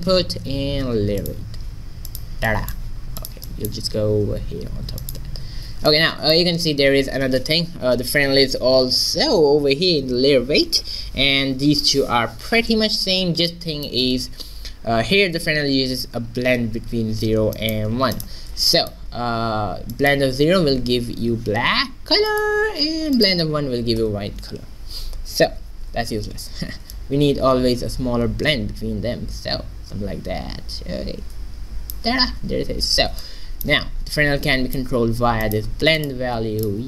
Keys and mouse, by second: 2.5 middle click, 3.3-5.0 drag, 4.2 g, 6.0 middle click, 6.2 middle click, 14.0-15.9 middle drag, 17.6 middle click, 20.6-21.7 drag, 22.4-25.0 drag, 27.0-28.8 drag, 33.3 middle click, 34.5 middle click, 35.5-36.8 drag.